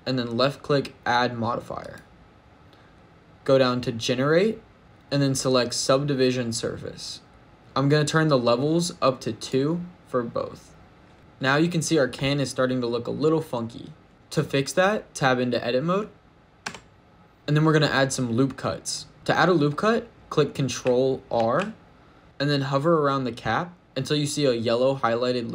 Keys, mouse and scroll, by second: 1.7 click, 5.8 click, 9.2 click, 11.1 shift+middle click, 11.1-13.0 scroll up 1, 16.5 Tab, 17.3 ctrl+z, 17.3 click, 21.2 ctrl+r.